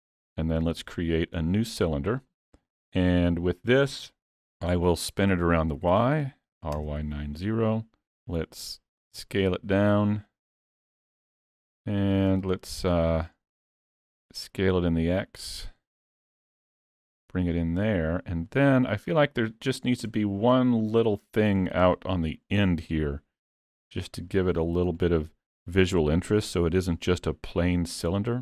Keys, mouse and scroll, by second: 0.8 shift+a, 5.4 r, 11.3 s, 12.5 middle click, 13.9 s, 16.4 click, 20.0 scroll up 2, 20.2 shift+middle click, 21.5-21.9 scroll up 4, 21.9 middle click, 24.4 click, 25.3 middle click.